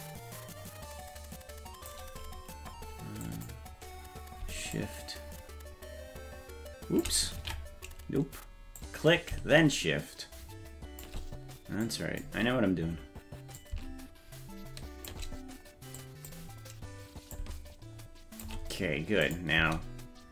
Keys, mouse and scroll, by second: 3.3 click, 4.8-7.1 shift+drag, 8.0 ctrl+z, 8.8-11.1 drag, 11.9 click, 13.6-15.1 shift+drag, 16.0 click, 17.4-18.5 shift+drag, 19.3 click, 19.6 space.